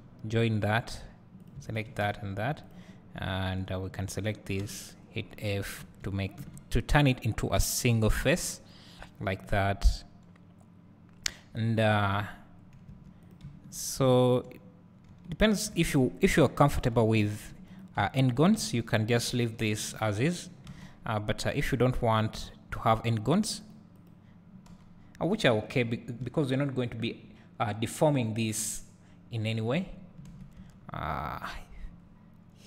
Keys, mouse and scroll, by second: 0.4 click, 1.8 shift+click, 2.0 f, 2.7 alt+click, 3.4 alt+shift+click, 4.6 f, 5.2 scroll up 1, 5.8 1, 6.3 alt+a, 7.5-7.8 scroll up 1, 11.9 3, 12.9 1, 13.3 click, 14.1 shift+click, 15.1 j, 15.7 alt+a, 16.8 click, 17.2 shift+click, 17.7 click, 18.8 shift+click, 20.3 click, 20.6 alt+a, 22.4 click, 26.2 Tab, 29.9 scroll up 1, 30.5 Tab, 30.9 scroll down 1, 31.4 scroll up 1, 31.8 scroll down 1, 32.2-32.6 scroll up 1.